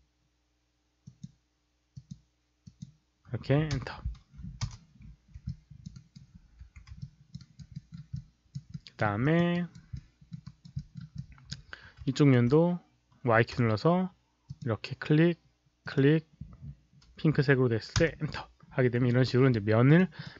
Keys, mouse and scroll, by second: 0.9 click, 1.8 click, 2.5 click, 3.6 shift+Return, 4.5 Return, 5.4 alt+click, 5.8 alt+right click, 6.5 4, 6.9 alt+click, 7.3 alt+right click, 7.6 alt+middle click, 8.0 alt+click, 8.6 alt+middle click, 9.1 alt+click, 9.4 alt+right click, 9.8 alt+middle click, 10.4 alt+right click, 10.7 alt+middle click, 11.1 alt+click, 11.6 5, 12.0 alt+right click, 13.5 y, 14.4 click, 15.7 click, 17.8 Return, 18.5-19.2 scroll down 1, 19.8 alt+middle click, 19.8 alt+right click, 20.1 alt+click.